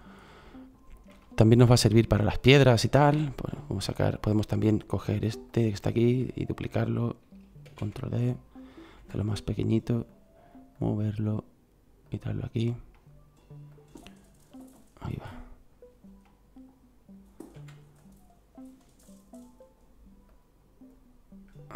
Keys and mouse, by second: 0.2-1.2 middle drag, 7.6 shift+d, 10.7-11.4 drag, 13.0-16.3 middle drag, 17.6 s, 19.0-21.0 drag.